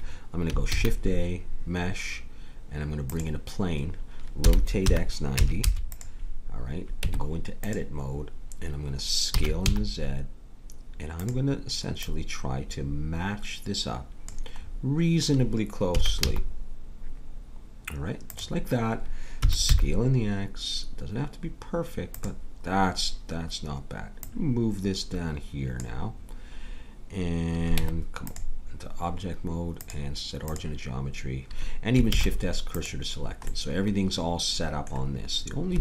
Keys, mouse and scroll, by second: 0.7 shift+a, 4.4 r, 7.0 Tab, 9.3 s, 12.0-13.9 drag, 14.6-15.9 middle drag, 15.9 s, 19.4 s, 24.2-26.1 drag, 27.7 Tab, 29.8-31.2 drag, 32.1 shift+s.